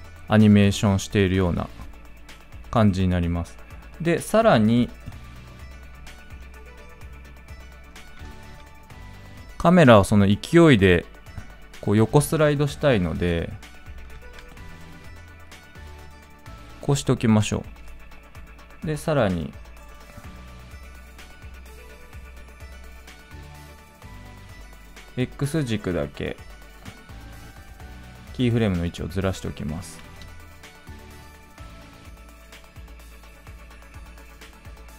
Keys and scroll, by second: 8.1 ctrl+z, 14.0 ctrl+z.